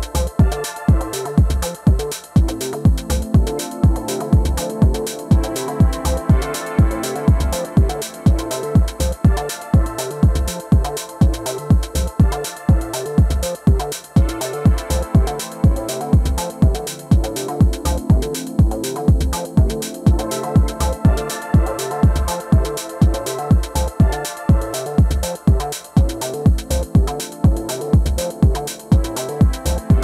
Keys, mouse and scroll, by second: 1.0-3.1 right drag, 2.4 s, 6.9-8.7 drag, 7.9-11.1 middle drag, 11.3-13.2 right drag, 12.6 g, 13.2 middle click, 14.9-18.4 right drag, 17.2 g, 18.7-20.5 middle drag, 21.2-23.2 right drag, 21.6-22.9 drag, 22.6 g, 23.2 middle click, 24.2-27.8 middle drag, 25.8 g, 27.8-29.5 right drag, 28.7 s.